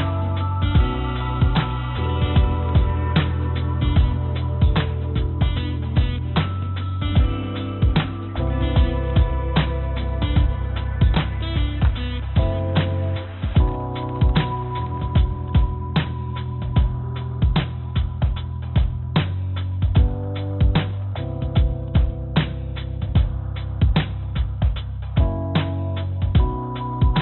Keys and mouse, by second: 0.0 Tab, 4.1 3, 4.5 click, 6.0 shift+click, 9.9 shift+click, 10.6 shift+click, 11.4 shift+click, 13.0 shift+click, 13.8 shift+click, 14.4-15.5 shift+drag, 18.0 click, 26.3 click.